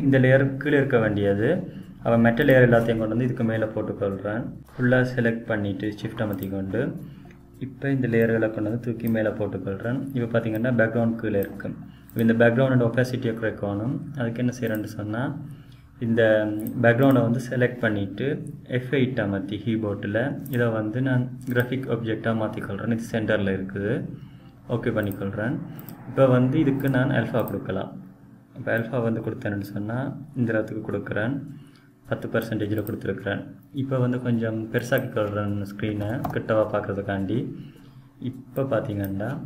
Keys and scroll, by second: 19.8 F8.